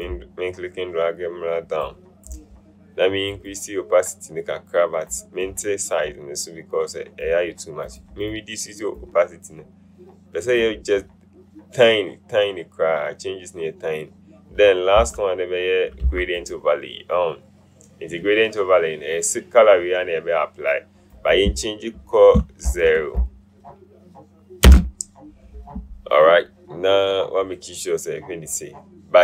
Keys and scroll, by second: 22.7 ctrl+a, 24.8 KP_0.